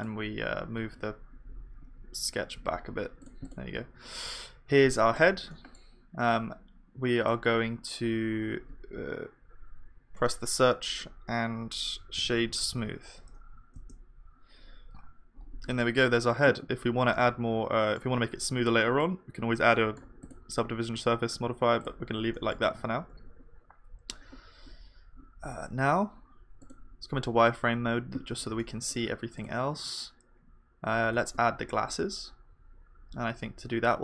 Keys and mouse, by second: 0.0-3.2 drag, 0.0-3.2 middle drag, 0.0-3.2 right drag, 0.8 g, 3.5-5.4 drag, 3.5 g, 4.1-5.4 right drag, 5.0-9.4 middle drag, 9.4 F3, 17.2-31.0 middle drag, 21.0-23.8 drag, 22.4-23.8 right drag, 23.3 KP_1, 30.1 click, 30.8 click, 31.2 shift+a.